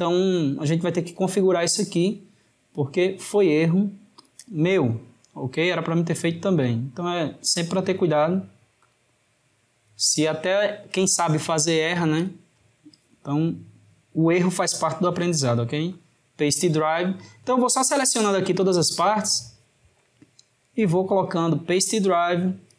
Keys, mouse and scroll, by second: 4.3 click, 5.3-7.5 middle drag, 7.5-10.5 right drag, 11.4 click, 12.3 click, 14.4-17.3 right drag, 17.3 click, 18.8 click, 20.7-22.7 right drag.